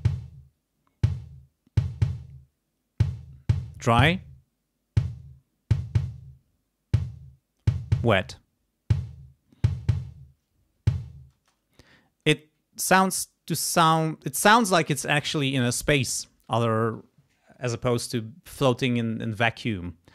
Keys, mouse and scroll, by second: 4.0 click, 8.1 click, 11.3 space.